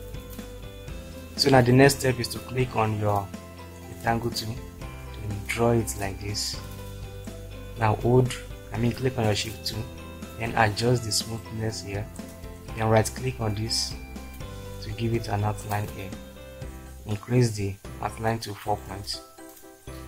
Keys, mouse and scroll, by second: 12.2 space.